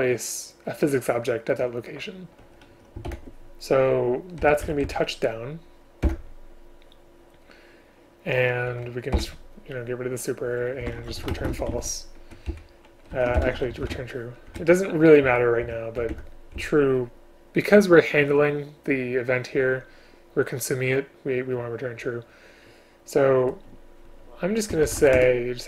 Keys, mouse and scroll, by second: 3.2 ctrl+o, 4.5 Down, 4.7 Down, 6.1 Return, 9.2 Delete, 11.4 space, 12.6 Up, 13.2 Down, 13.5 ctrl+BackSpace, 14.6 Up, 15.8 End, 16.1 Return, 16.7 Up, 25.3 Tab.